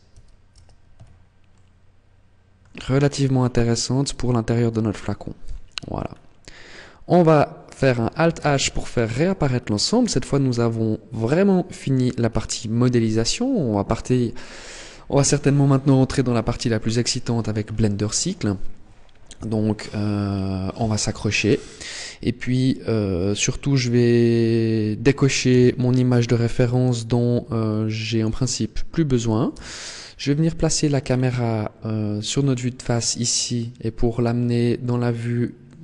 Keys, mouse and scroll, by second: 0.3 Tab, 0.8 a, 1.3 middle click, 2.5-3.4 scroll down 9, 3.6 middle click, 5.3 KP_1, 5.9-6.8 scroll up 3, 6.8 scroll up 2, 8.1 alt+h, 9.0 Tab, 9.4-9.8 scroll down 4, 10.7 shift+middle click, 11.5-11.9 scroll up 3, 12.3 scroll down 1, 19.7-21.1 scroll down 3, 21.1 scroll down 1, 23.4-25.3 scroll up 2, 25.3 n, 27.9 click, 29.0 click, 29.3 n, 30.1-30.7 scroll down 1, 30.7-31.1 scroll down 8, 31.1 scroll up 7, 31.8-32.6 scroll up 1, 34.6 middle click.